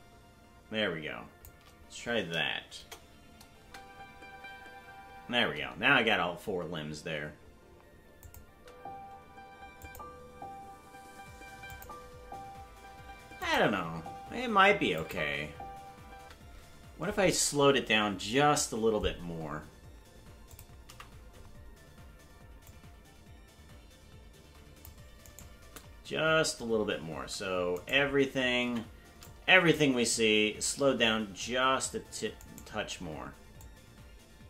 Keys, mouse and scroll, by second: 2.7 KP_0, 3.6 space, 8.2 click, 8.2 space, 8.5 space, 9.8 click, 11.7 click, 13.4 click, 15.0 click, 16.1 space, 20.5 click, 20.9 a, 22.7-24.9 drag, 25.2 right click, 27.1 c, 28.7 a, 29.2 click, 30.8 s, 33.6 click.